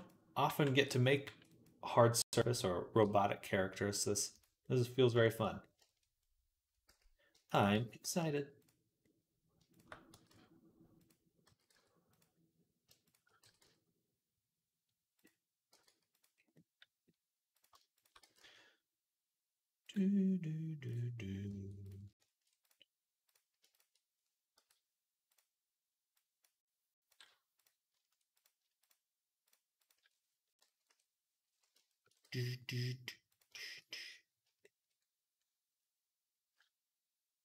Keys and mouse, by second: 0.3 b, 1.1 b, 2.2 z, 2.9 g, 6.7 z, 7.4 z, 7.6 z, 7.9 g, 9.4-11.3 shift+middle drag, 10.0 g, 11.3 s, 13.2 g, 15.5 g, 16.2 right click, 30.7 KP_3, 31.8-33.5 shift+middle drag, 32.1 g.